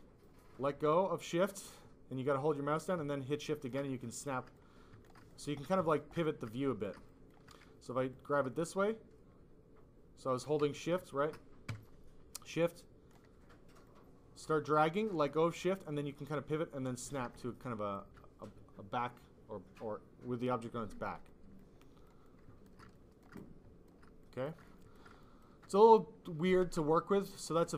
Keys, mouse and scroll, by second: 4.5 click, 5.6 click, 6.5 click, 8.0 shift+click, 11.3 ctrl+z, 12.4 shift+click, 13.8 shift+click, 21.2 click, 21.7 click, 22.2 click, 23.3 click, 24.6 click.